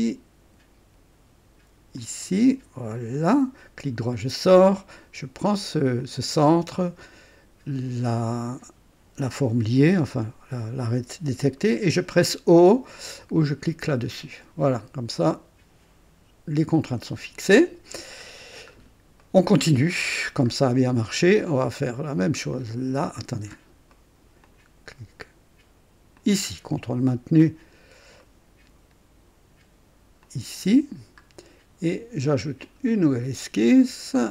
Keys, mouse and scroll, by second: 2.0 click, 3.2 click, 3.8 right click, 6.0 click, 8.2 click, 13.8 o, 14.0 o, 16.9 click, 18.7-19.0 scroll down 1, 19.2 right click, 19.9 right click, 20.5-21.0 scroll up 1, 22.5 click, 23.5-23.8 scroll up 1, 23.9 right click, 24.5 click, 26.1 click, 28.2 ctrl+right click, 30.3 ctrl+click, 30.5 typing, 30.8-31.2 ctrl+scroll down 1, 32.6 click.